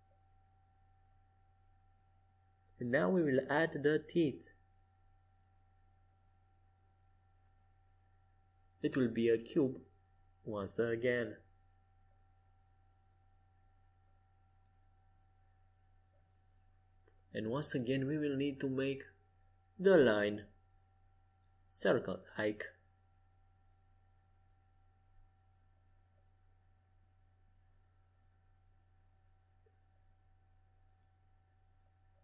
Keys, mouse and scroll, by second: 1.3 z, 2.2 shift+a, 12.6 Tab, 14.5-15.6 middle drag, 14.5 Tab, 15.1 Tab, 15.9-17.6 drag, 17.6 Tab, 18.1-26.5 right drag, 20.8 Tab, 22.0 Tab, 25.3 z, 27.7 Tab.